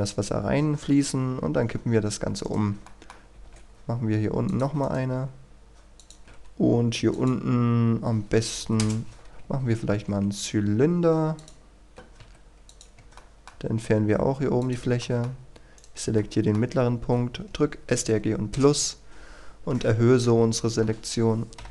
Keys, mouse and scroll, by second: 1.4 r, 2.4 right click, 2.8 shift+middle click, 3.3 shift+d, 4.5 click, 4.8 right click, 5.1 typing, 6.0 click, 6.2 shift+a, 7.1 click, 8.6 Delete, 8.8 Return, 11.4 click, 12.9 Tab, 13.1 middle click, 13.9-14.6 scroll up 1, 14.6 click, 15.0 middle click, 15.7 right click, 16.1 middle click, 21.6 Delete.